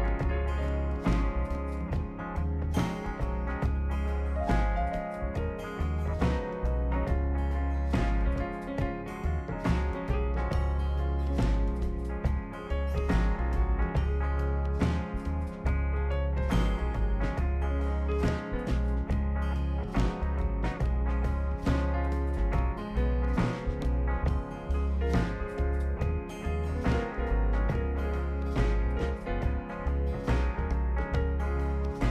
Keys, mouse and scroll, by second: 0.3 scroll down 2, 0.5 right click, 3.8 click, 4.6 click, 5.3 click, 5.9 ctrl+click, 8.3 click, 8.9 click, 9.7 click, 10.4 ctrl+click, 11.1 click, 11.8 click, 12.3 click, 12.9 ctrl+click, 13.6 click, 15.0 click, 15.5 ctrl+click, 16.2 click, 16.9 click, 19.4-20.8 drag, 21.4 click, 22.4 ctrl+click, 23.4 click, 24.0 click, 24.4 ctrl+click, 25.1 click, 25.3 click, 25.6 click, 25.9 ctrl+click, 26.2 click, 26.5 click, 26.6 click, 27.0 ctrl+click, 27.2 click, 27.8 middle drag, 27.8-28.2 scroll up 4, 28.0 middle click, 28.4 click, 28.9 click, 29.2-29.6 ctrl+scroll down 5, 30.8 ctrl+click, 31.7 ctrl+click.